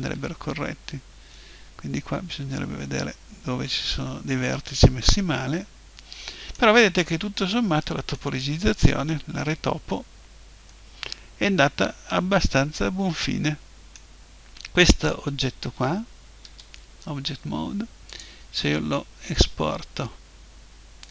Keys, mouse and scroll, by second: 0.0 Escape, 0.8-2.6 middle drag, 6.9-12.8 middle drag, 14.3-16.4 middle drag, 16.4 Tab, 18.0-20.1 drag, 20.0 middle click.